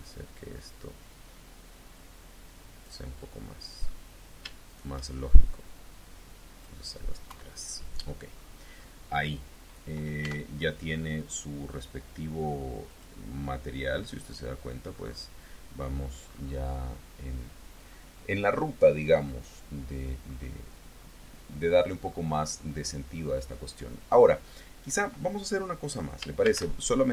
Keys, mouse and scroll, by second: 3.1 click, 4.5 shift+click, 5.3-6.6 drag, 7.1 KP_1, 8.2 scroll up 2, 8.7 middle click, 9.0 middle click, 10.0 Tab, 12.7 click, 14.1 click, 14.7-15.1 scroll up 1, 15.5-15.9 scroll down 1, 15.9-16.5 scroll up 1, 16.8-17.2 scroll down 1, 17.7 scroll down 1, 18.3-18.7 scroll up 2, 19.1 scroll up 2, 20.1-20.4 scroll up 2, 20.7 scroll down 2, 21.5-21.9 scroll up 2, 22.0 scroll down 2, 22.2-22.5 scroll up 2, 22.5-22.9 scroll down 2, 26.3 shift+a.